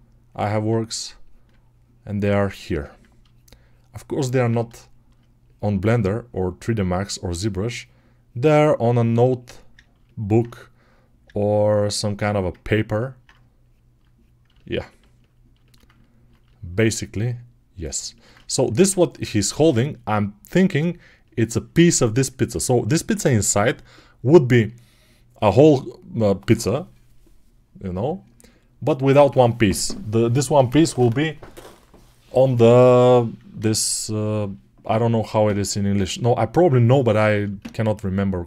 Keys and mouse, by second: 12.4 ctrl+alt+right click, 12.6-38.4 alt+drag.